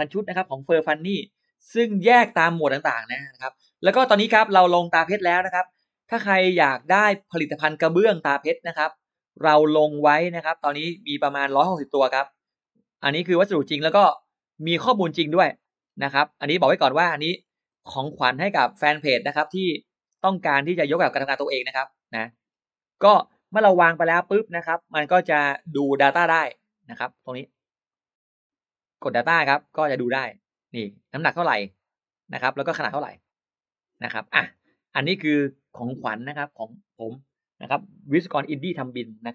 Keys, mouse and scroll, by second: 1.7-2.0 scroll up 1, 5.3 click, 7.3-8.0 scroll down 2, 8.9 click, 9.4 click, 10.4-11.1 scroll up 1, 11.2-11.6 scroll down 2, 12.4 click, 13.2 click, 14.8 click, 15.6-15.9 scroll down 2, 16.4 click, 17.3-18.4 scroll up 6, 20.0 click, 21.3 click, 22.1 middle click, 23.7 middle click, 24.5 click, 24.5 space, 24.8-25.4 scroll up 1, 25.4-25.9 scroll up 1, 25.9-26.3 scroll down 1, 26.4 click, 27.7 click, 28.8 click, 29.6 click, 32.8 click, 34.4 click.